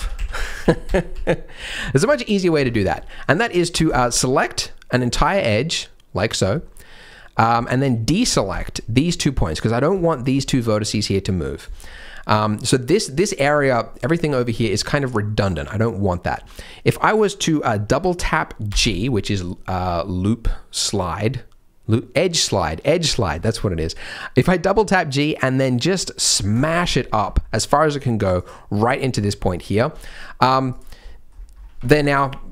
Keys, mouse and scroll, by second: 0.1 ctrl+z, 0.3 ctrl+z, 0.6 ctrl+z, 0.8 ctrl+z, 1.1 ctrl+z, 1.8 scroll up 2, 2.1 shift+middle click, 2.4 scroll down 3, 2.6 shift+middle click, 3.0 middle click, 3.8 alt+click, 4.3 middle click, 5.2 middle click, 6.6 middle click, 7.5-8.1 scroll up 4, 7.9 middle click, 8.5 shift+click, 9.2 middle click, 10.1 shift+click, 10.4 middle click, 11.1 middle click, 11.4 scroll down 2, 11.7 shift+middle click, 11.9 middle click, 18.6 g, 26.8-27.1 scroll up 2, 27.1 scroll down 1, 27.2 scroll down 1, 27.4 middle click, 28.3 click, 29.1-29.4 scroll down 2, 29.4 middle click, 29.9 click, 30.6 click, 31.0 middle click, 31.3 scroll up 2, 32.1 scroll up 2.